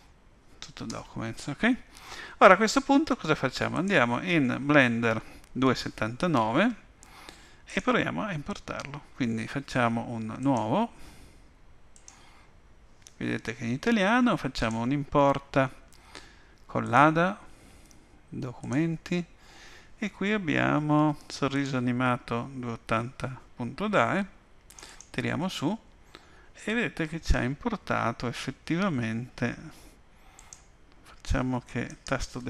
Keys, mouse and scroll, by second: 0.9 Return.